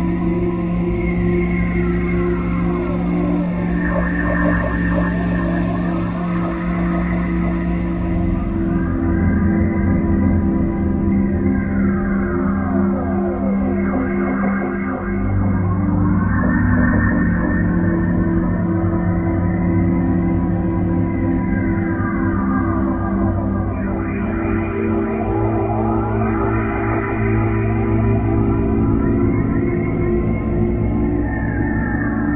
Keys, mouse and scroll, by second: 0.6 click, 1.5 click, 4.5 click, 5.5 click, 7.2 click, 8.3 click, 9.6 right click, 11.3 click, 14.3 right click, 15.3 right click, 16.4 right click, 25.9 click, 28.9 right click, 30.5 right click, 31.9 middle click.